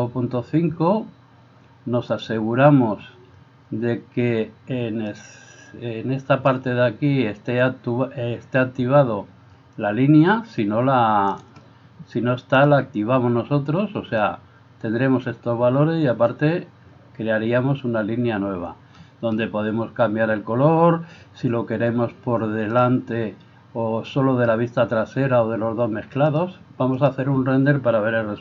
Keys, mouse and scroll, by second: 2.1 click, 11.4-27.1 drag, 11.4 middle click, 11.4 right click.